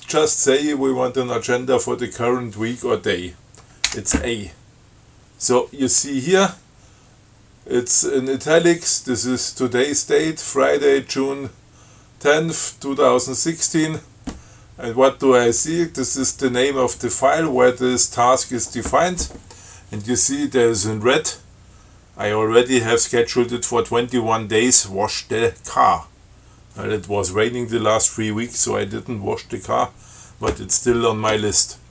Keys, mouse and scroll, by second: 4.1 a.